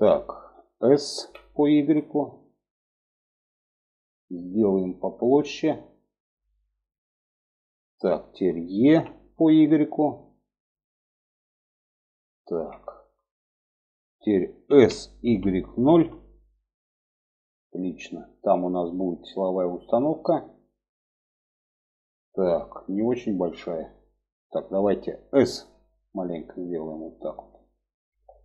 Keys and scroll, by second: 0.7 s, 8.4 e, 14.2 s, 25.1 s.